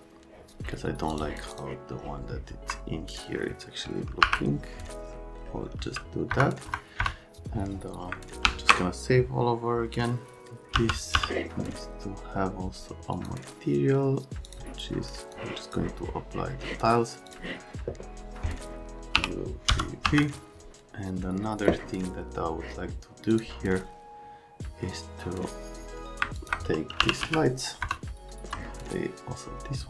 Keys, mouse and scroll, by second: 1.1 click, 1.5 click, 2.5 F3, 3.1 click, 4.2 Delete, 5.7 z, 6.3 F3, 6.7 F3, 7.0 F3, 8.4 s, 10.7 c, 11.1 c, 13.1 click, 14.4 click, 15.3 click, 17.3 click, 19.1 y, 19.7 c, 20.0 q, 23.3 click, 26.4 click, 26.7-27.7 typing, 27.8 F3.